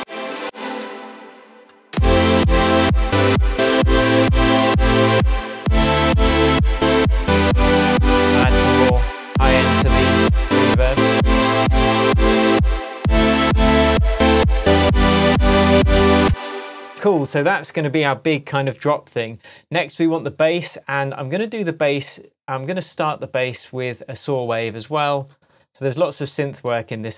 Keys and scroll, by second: 0.0 space, 5.1 Tab, 15.0 Tab, 16.2 space, 16.9 super+s.